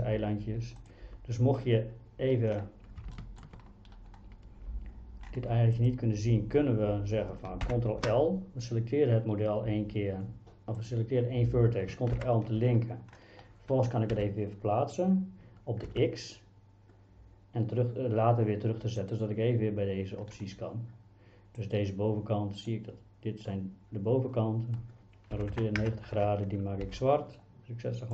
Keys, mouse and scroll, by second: 0.8 click, 3.3 shift+middle click, 5.9-7.3 drag, 7.7 ctrl+l, 12.2 ctrl+l, 14.2 g, 15.9 x, 19.0 click, 21.8-22.8 drag, 25.4 r, 25.5 KP_9, 25.8 KP_0, 26.2 KP_Enter, 26.9 g.